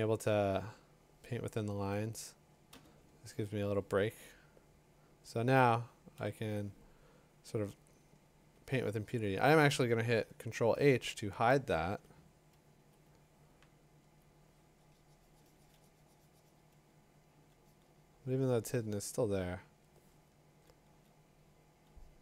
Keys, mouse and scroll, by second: 0.9 click, 2.7 b, 6.2 b, 8.5 ctrl+h, 11.3 b, 14.2 click, 20.1 [.